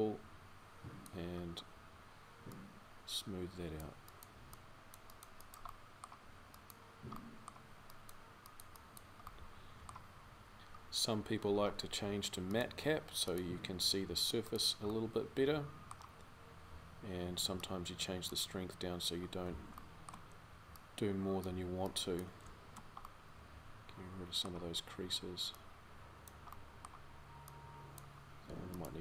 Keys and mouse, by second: 22.4-29.0 middle drag.